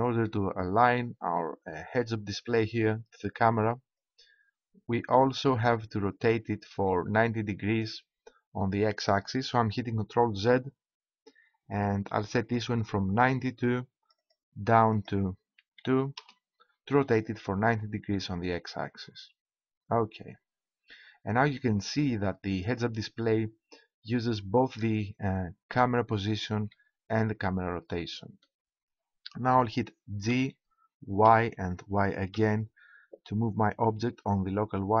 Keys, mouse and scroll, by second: 4.0-5.8 drag, 11.0 ctrl+z, 13.5-14.9 drag, 14.9 middle click, 15.0-16.7 drag, 16.7 middle click, 18.1-20.2 middle drag, 20.8 middle click, 26.7 middle click, 30.2 g.